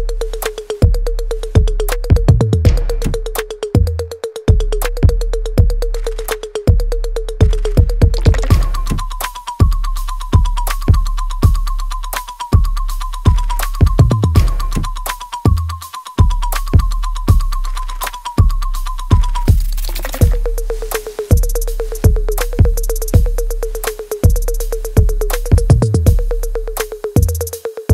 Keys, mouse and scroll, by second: 0.7 right click, 1.8 click, 2.0 alt+click, 3.2 alt+right click, 3.8 alt+click, 4.4 alt+right click, 4.8 alt+click, 5.7 alt+middle click, 6.1 alt+right click, 7.0 click, 7.8 alt+right click, 8.2 alt+click, 8.9 alt+middle click, 9.7 right click, 10.6 click, 14.7-16.0 alt+drag, 16.0 ctrl+b, 17.1-18.4 drag, 18.4-21.9 ctrl+drag, 21.9 right click, 22.4 click, 22.7 alt+right click, 23.0 alt+click, 24.1 middle click, 24.6 alt+right click, 24.9 alt+click, 25.3 alt+right click, 25.7 alt+middle click, 26.2-27.9 alt+drag.